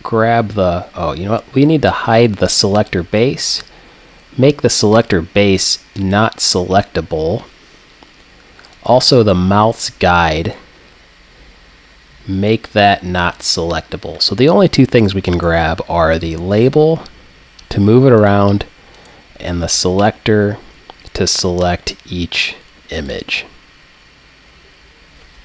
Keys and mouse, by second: 2.8-7.7 drag, 7.7-8.7 middle drag, 8.7-12.1 drag, 12.5-15.4 drag, 15.4-17.3 right drag, 16.3 g, 18.3-20.4 drag, 19.0-20.1 right drag, 19.6 g, 23.1 click.